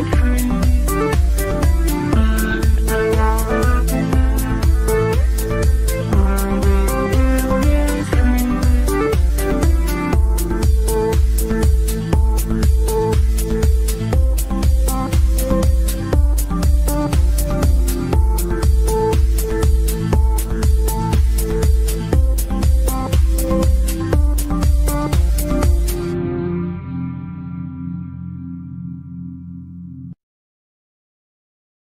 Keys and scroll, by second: 28.4 Delete.